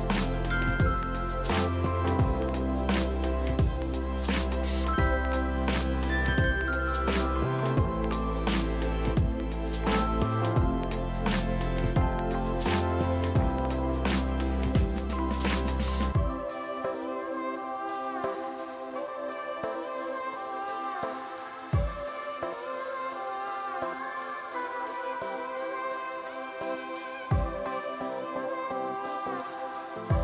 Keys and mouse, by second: 7.9 ctrl+e, 8.0 click, 10.7 click, 12.0 ctrl+r, 12.3 click, 12.8 Escape, 13.1 ctrl+r, 13.2 Right, 13.6 click, 14.3-18.1 typing, 14.3 Return, 15.0 click, 15.3 click, 16.0 Return, 16.4 click, 16.5 right click, 16.9 click, 18.6 click, 18.9 ctrl+a, 19.0 click, 19.6 ctrl+1, 19.6 click, 20.0 Delete, 20.7 click, 21.3 ctrl+z, 21.6 click, 22.0 click, 22.4 KP_0, 22.5 Return, 22.7 click, 22.9 Delete, 24.4 click, 25.4 right click, 26.5 click, 29.2 ctrl+1, 29.3 click.